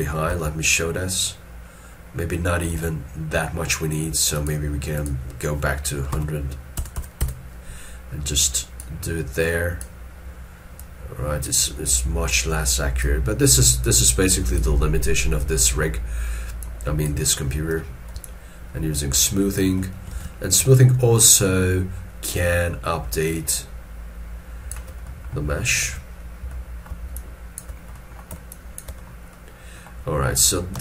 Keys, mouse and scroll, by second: 0.3 click, 0.3 alt+e, 1.0 middle click, 1.7-2.7 scroll up 1, 2.8 alt+e, 6.2 1, 18.3 shift+click, 20.2 alt+e, 20.8 shift+click, 25.1 middle click, 25.9 alt+e, 26.3 scroll down 1, 26.5 middle click, 27.2 shift+click, 28.0 middle click, 28.5 shift+click, 29.1 scroll down 1.